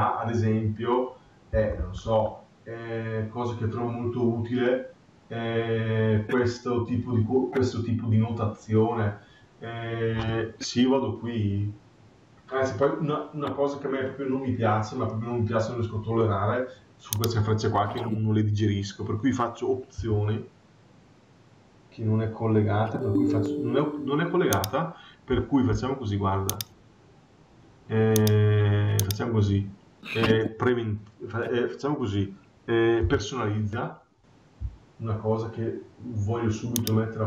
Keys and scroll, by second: 1.4 Escape.